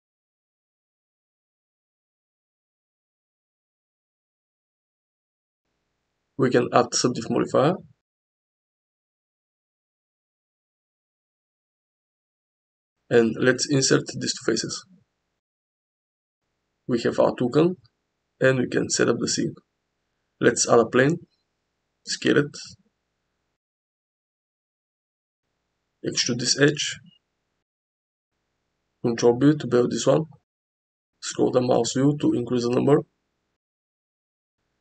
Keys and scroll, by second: 1.8 g, 4.0 s, 5.1 Tab, 11.0 Tab, 12.4 3, 14.8 1, 16.6 Tab, 18.3 g, 18.5 z, 20.0 shift+a, 21.9 s, 23.5 s, 23.7 x, 24.9 Tab, 25.5 2, 26.1 e, 26.4 z, 26.6 z, 30.2 ctrl+b, 33.4 Tab.